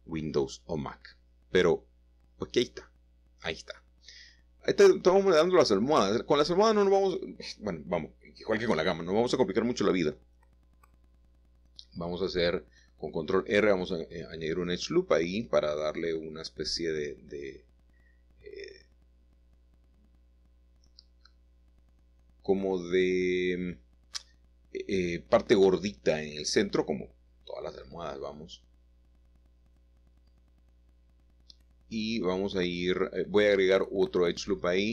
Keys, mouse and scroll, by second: 0.7 click, 1.2-1.7 shift+scroll down 1, 4.5 2, 5.4 click, 7.2 middle click, 7.6-8.6 middle drag, 9.8 ctrl+r, 13.0 s, 16.2 middle click, 22.1-23.0 typing, 25.6 Escape, 27.8 middle click, 29.6-30.0 typing, 31.5 Escape, 32.4 ctrl+r, 33.1 Escape, 33.2 Escape.